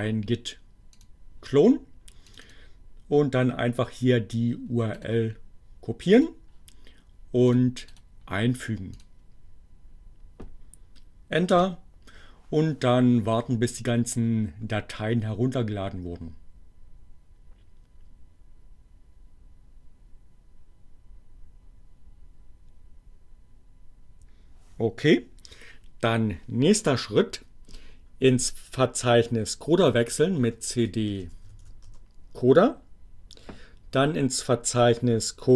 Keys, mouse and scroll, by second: 0.8 click, 2.4 click, 3.3-5.3 right drag, 6.0 click, 7.5 click, 7.9 right click, 8.7 click, 11.0 Return, 28.8-32.0 typing.